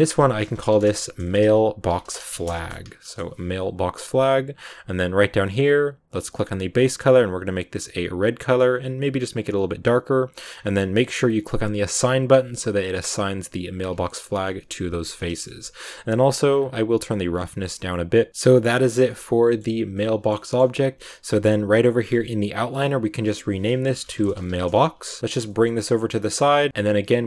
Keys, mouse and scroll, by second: 3.8-4.3 scroll down 6, 6.3 click, 10.4-10.7 scroll up 7, 11.9-13.9 drag, 13.8 Tab, 14.5 middle click, 15.1 scroll down 2, 15.2 shift+middle click, 15.7-16.4 scroll down 8, 16.4 scroll up 1, 16.5-18.0 scroll down 1, 18.0 click, 18.3-21.2 middle drag, 21.2-22.9 right drag, 22.9 click, 23.0-25.2 drag, 25.2 scroll down 2, 25.3 g, 26.7 scroll up 3, 26.9-27.2 middle drag.